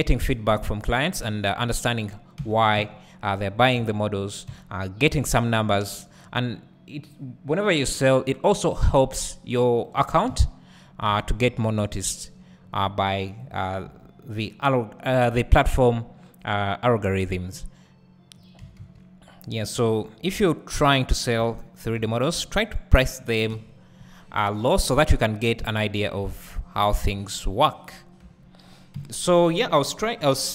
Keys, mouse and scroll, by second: 0.9 scroll up 1, 1.4-2.4 scroll down 1, 2.4 Tab, 3.8 alt+a, 6.2 b, 9.0-13.5 drag, 10.0 Tab, 11.1 alt+a, 11.3-11.8 scroll up 2, 12.6-13.5 scroll up 2, 13.9 Tab, 15.1 3, 15.6 click, 18.4 click, 18.6 s, 21.3 click, 21.4 Tab, 22.0 `, 23.5 KP_1, 24.4 scroll down 1, 25.3 Tab, 25.6 `, 27.0 2, 27.7 click, 28.2 Tab, 28.9 KP_1, 29.7-30.5 scroll down 1.